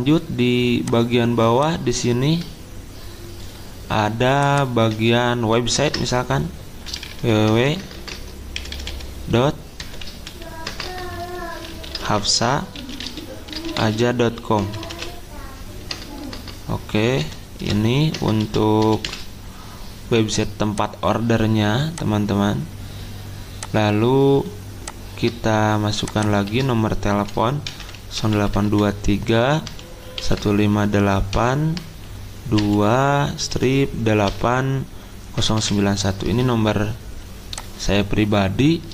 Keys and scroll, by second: 4.9 Caps_Lock, 5.8 ctrl+a, 6.9-19.5 typing, 26.5 ctrl+a, 27.4-31.3 typing, 32.6-36.1 typing.